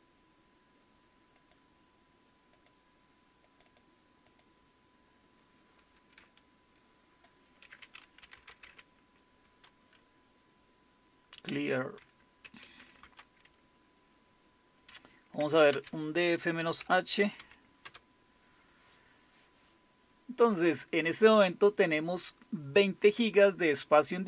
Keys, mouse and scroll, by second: 1.4 click, 2.6 click, 3.5 click, 4.3 click, 6.2 F10, 8.0-9.1 typing, 9.4 Return, 11.6-13.3 typing, 15.2-17.9 typing.